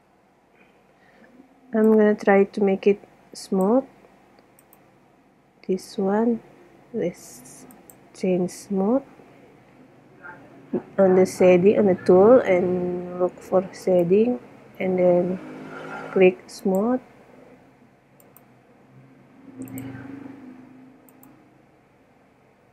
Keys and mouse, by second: 2.1-2.8 drag, 4.0-4.8 middle drag, 4.8 right click, 8.0 click, 14.0 right click, 16.8-18.6 drag, 20.0 click, 20.7 click.